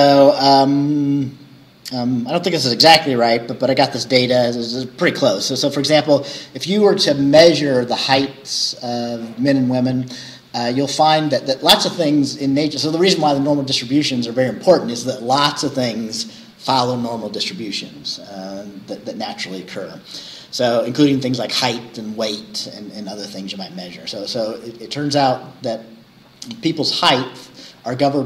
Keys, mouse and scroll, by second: 0.2-0.6 scroll down 2.